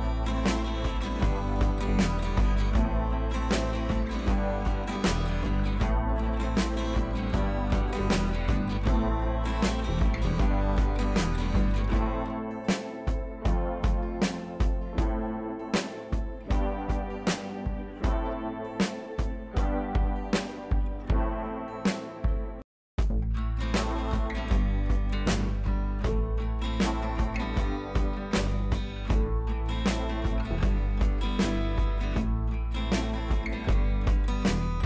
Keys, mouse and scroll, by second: 4.6-13.8 drag, 19.2 scroll down 1, 21.7-22.2 scroll down 1, 23.3 scroll down 1, 24.5 scroll down 1, 28.8-29.4 scroll down 1, 34.7-34.8 scroll down 1.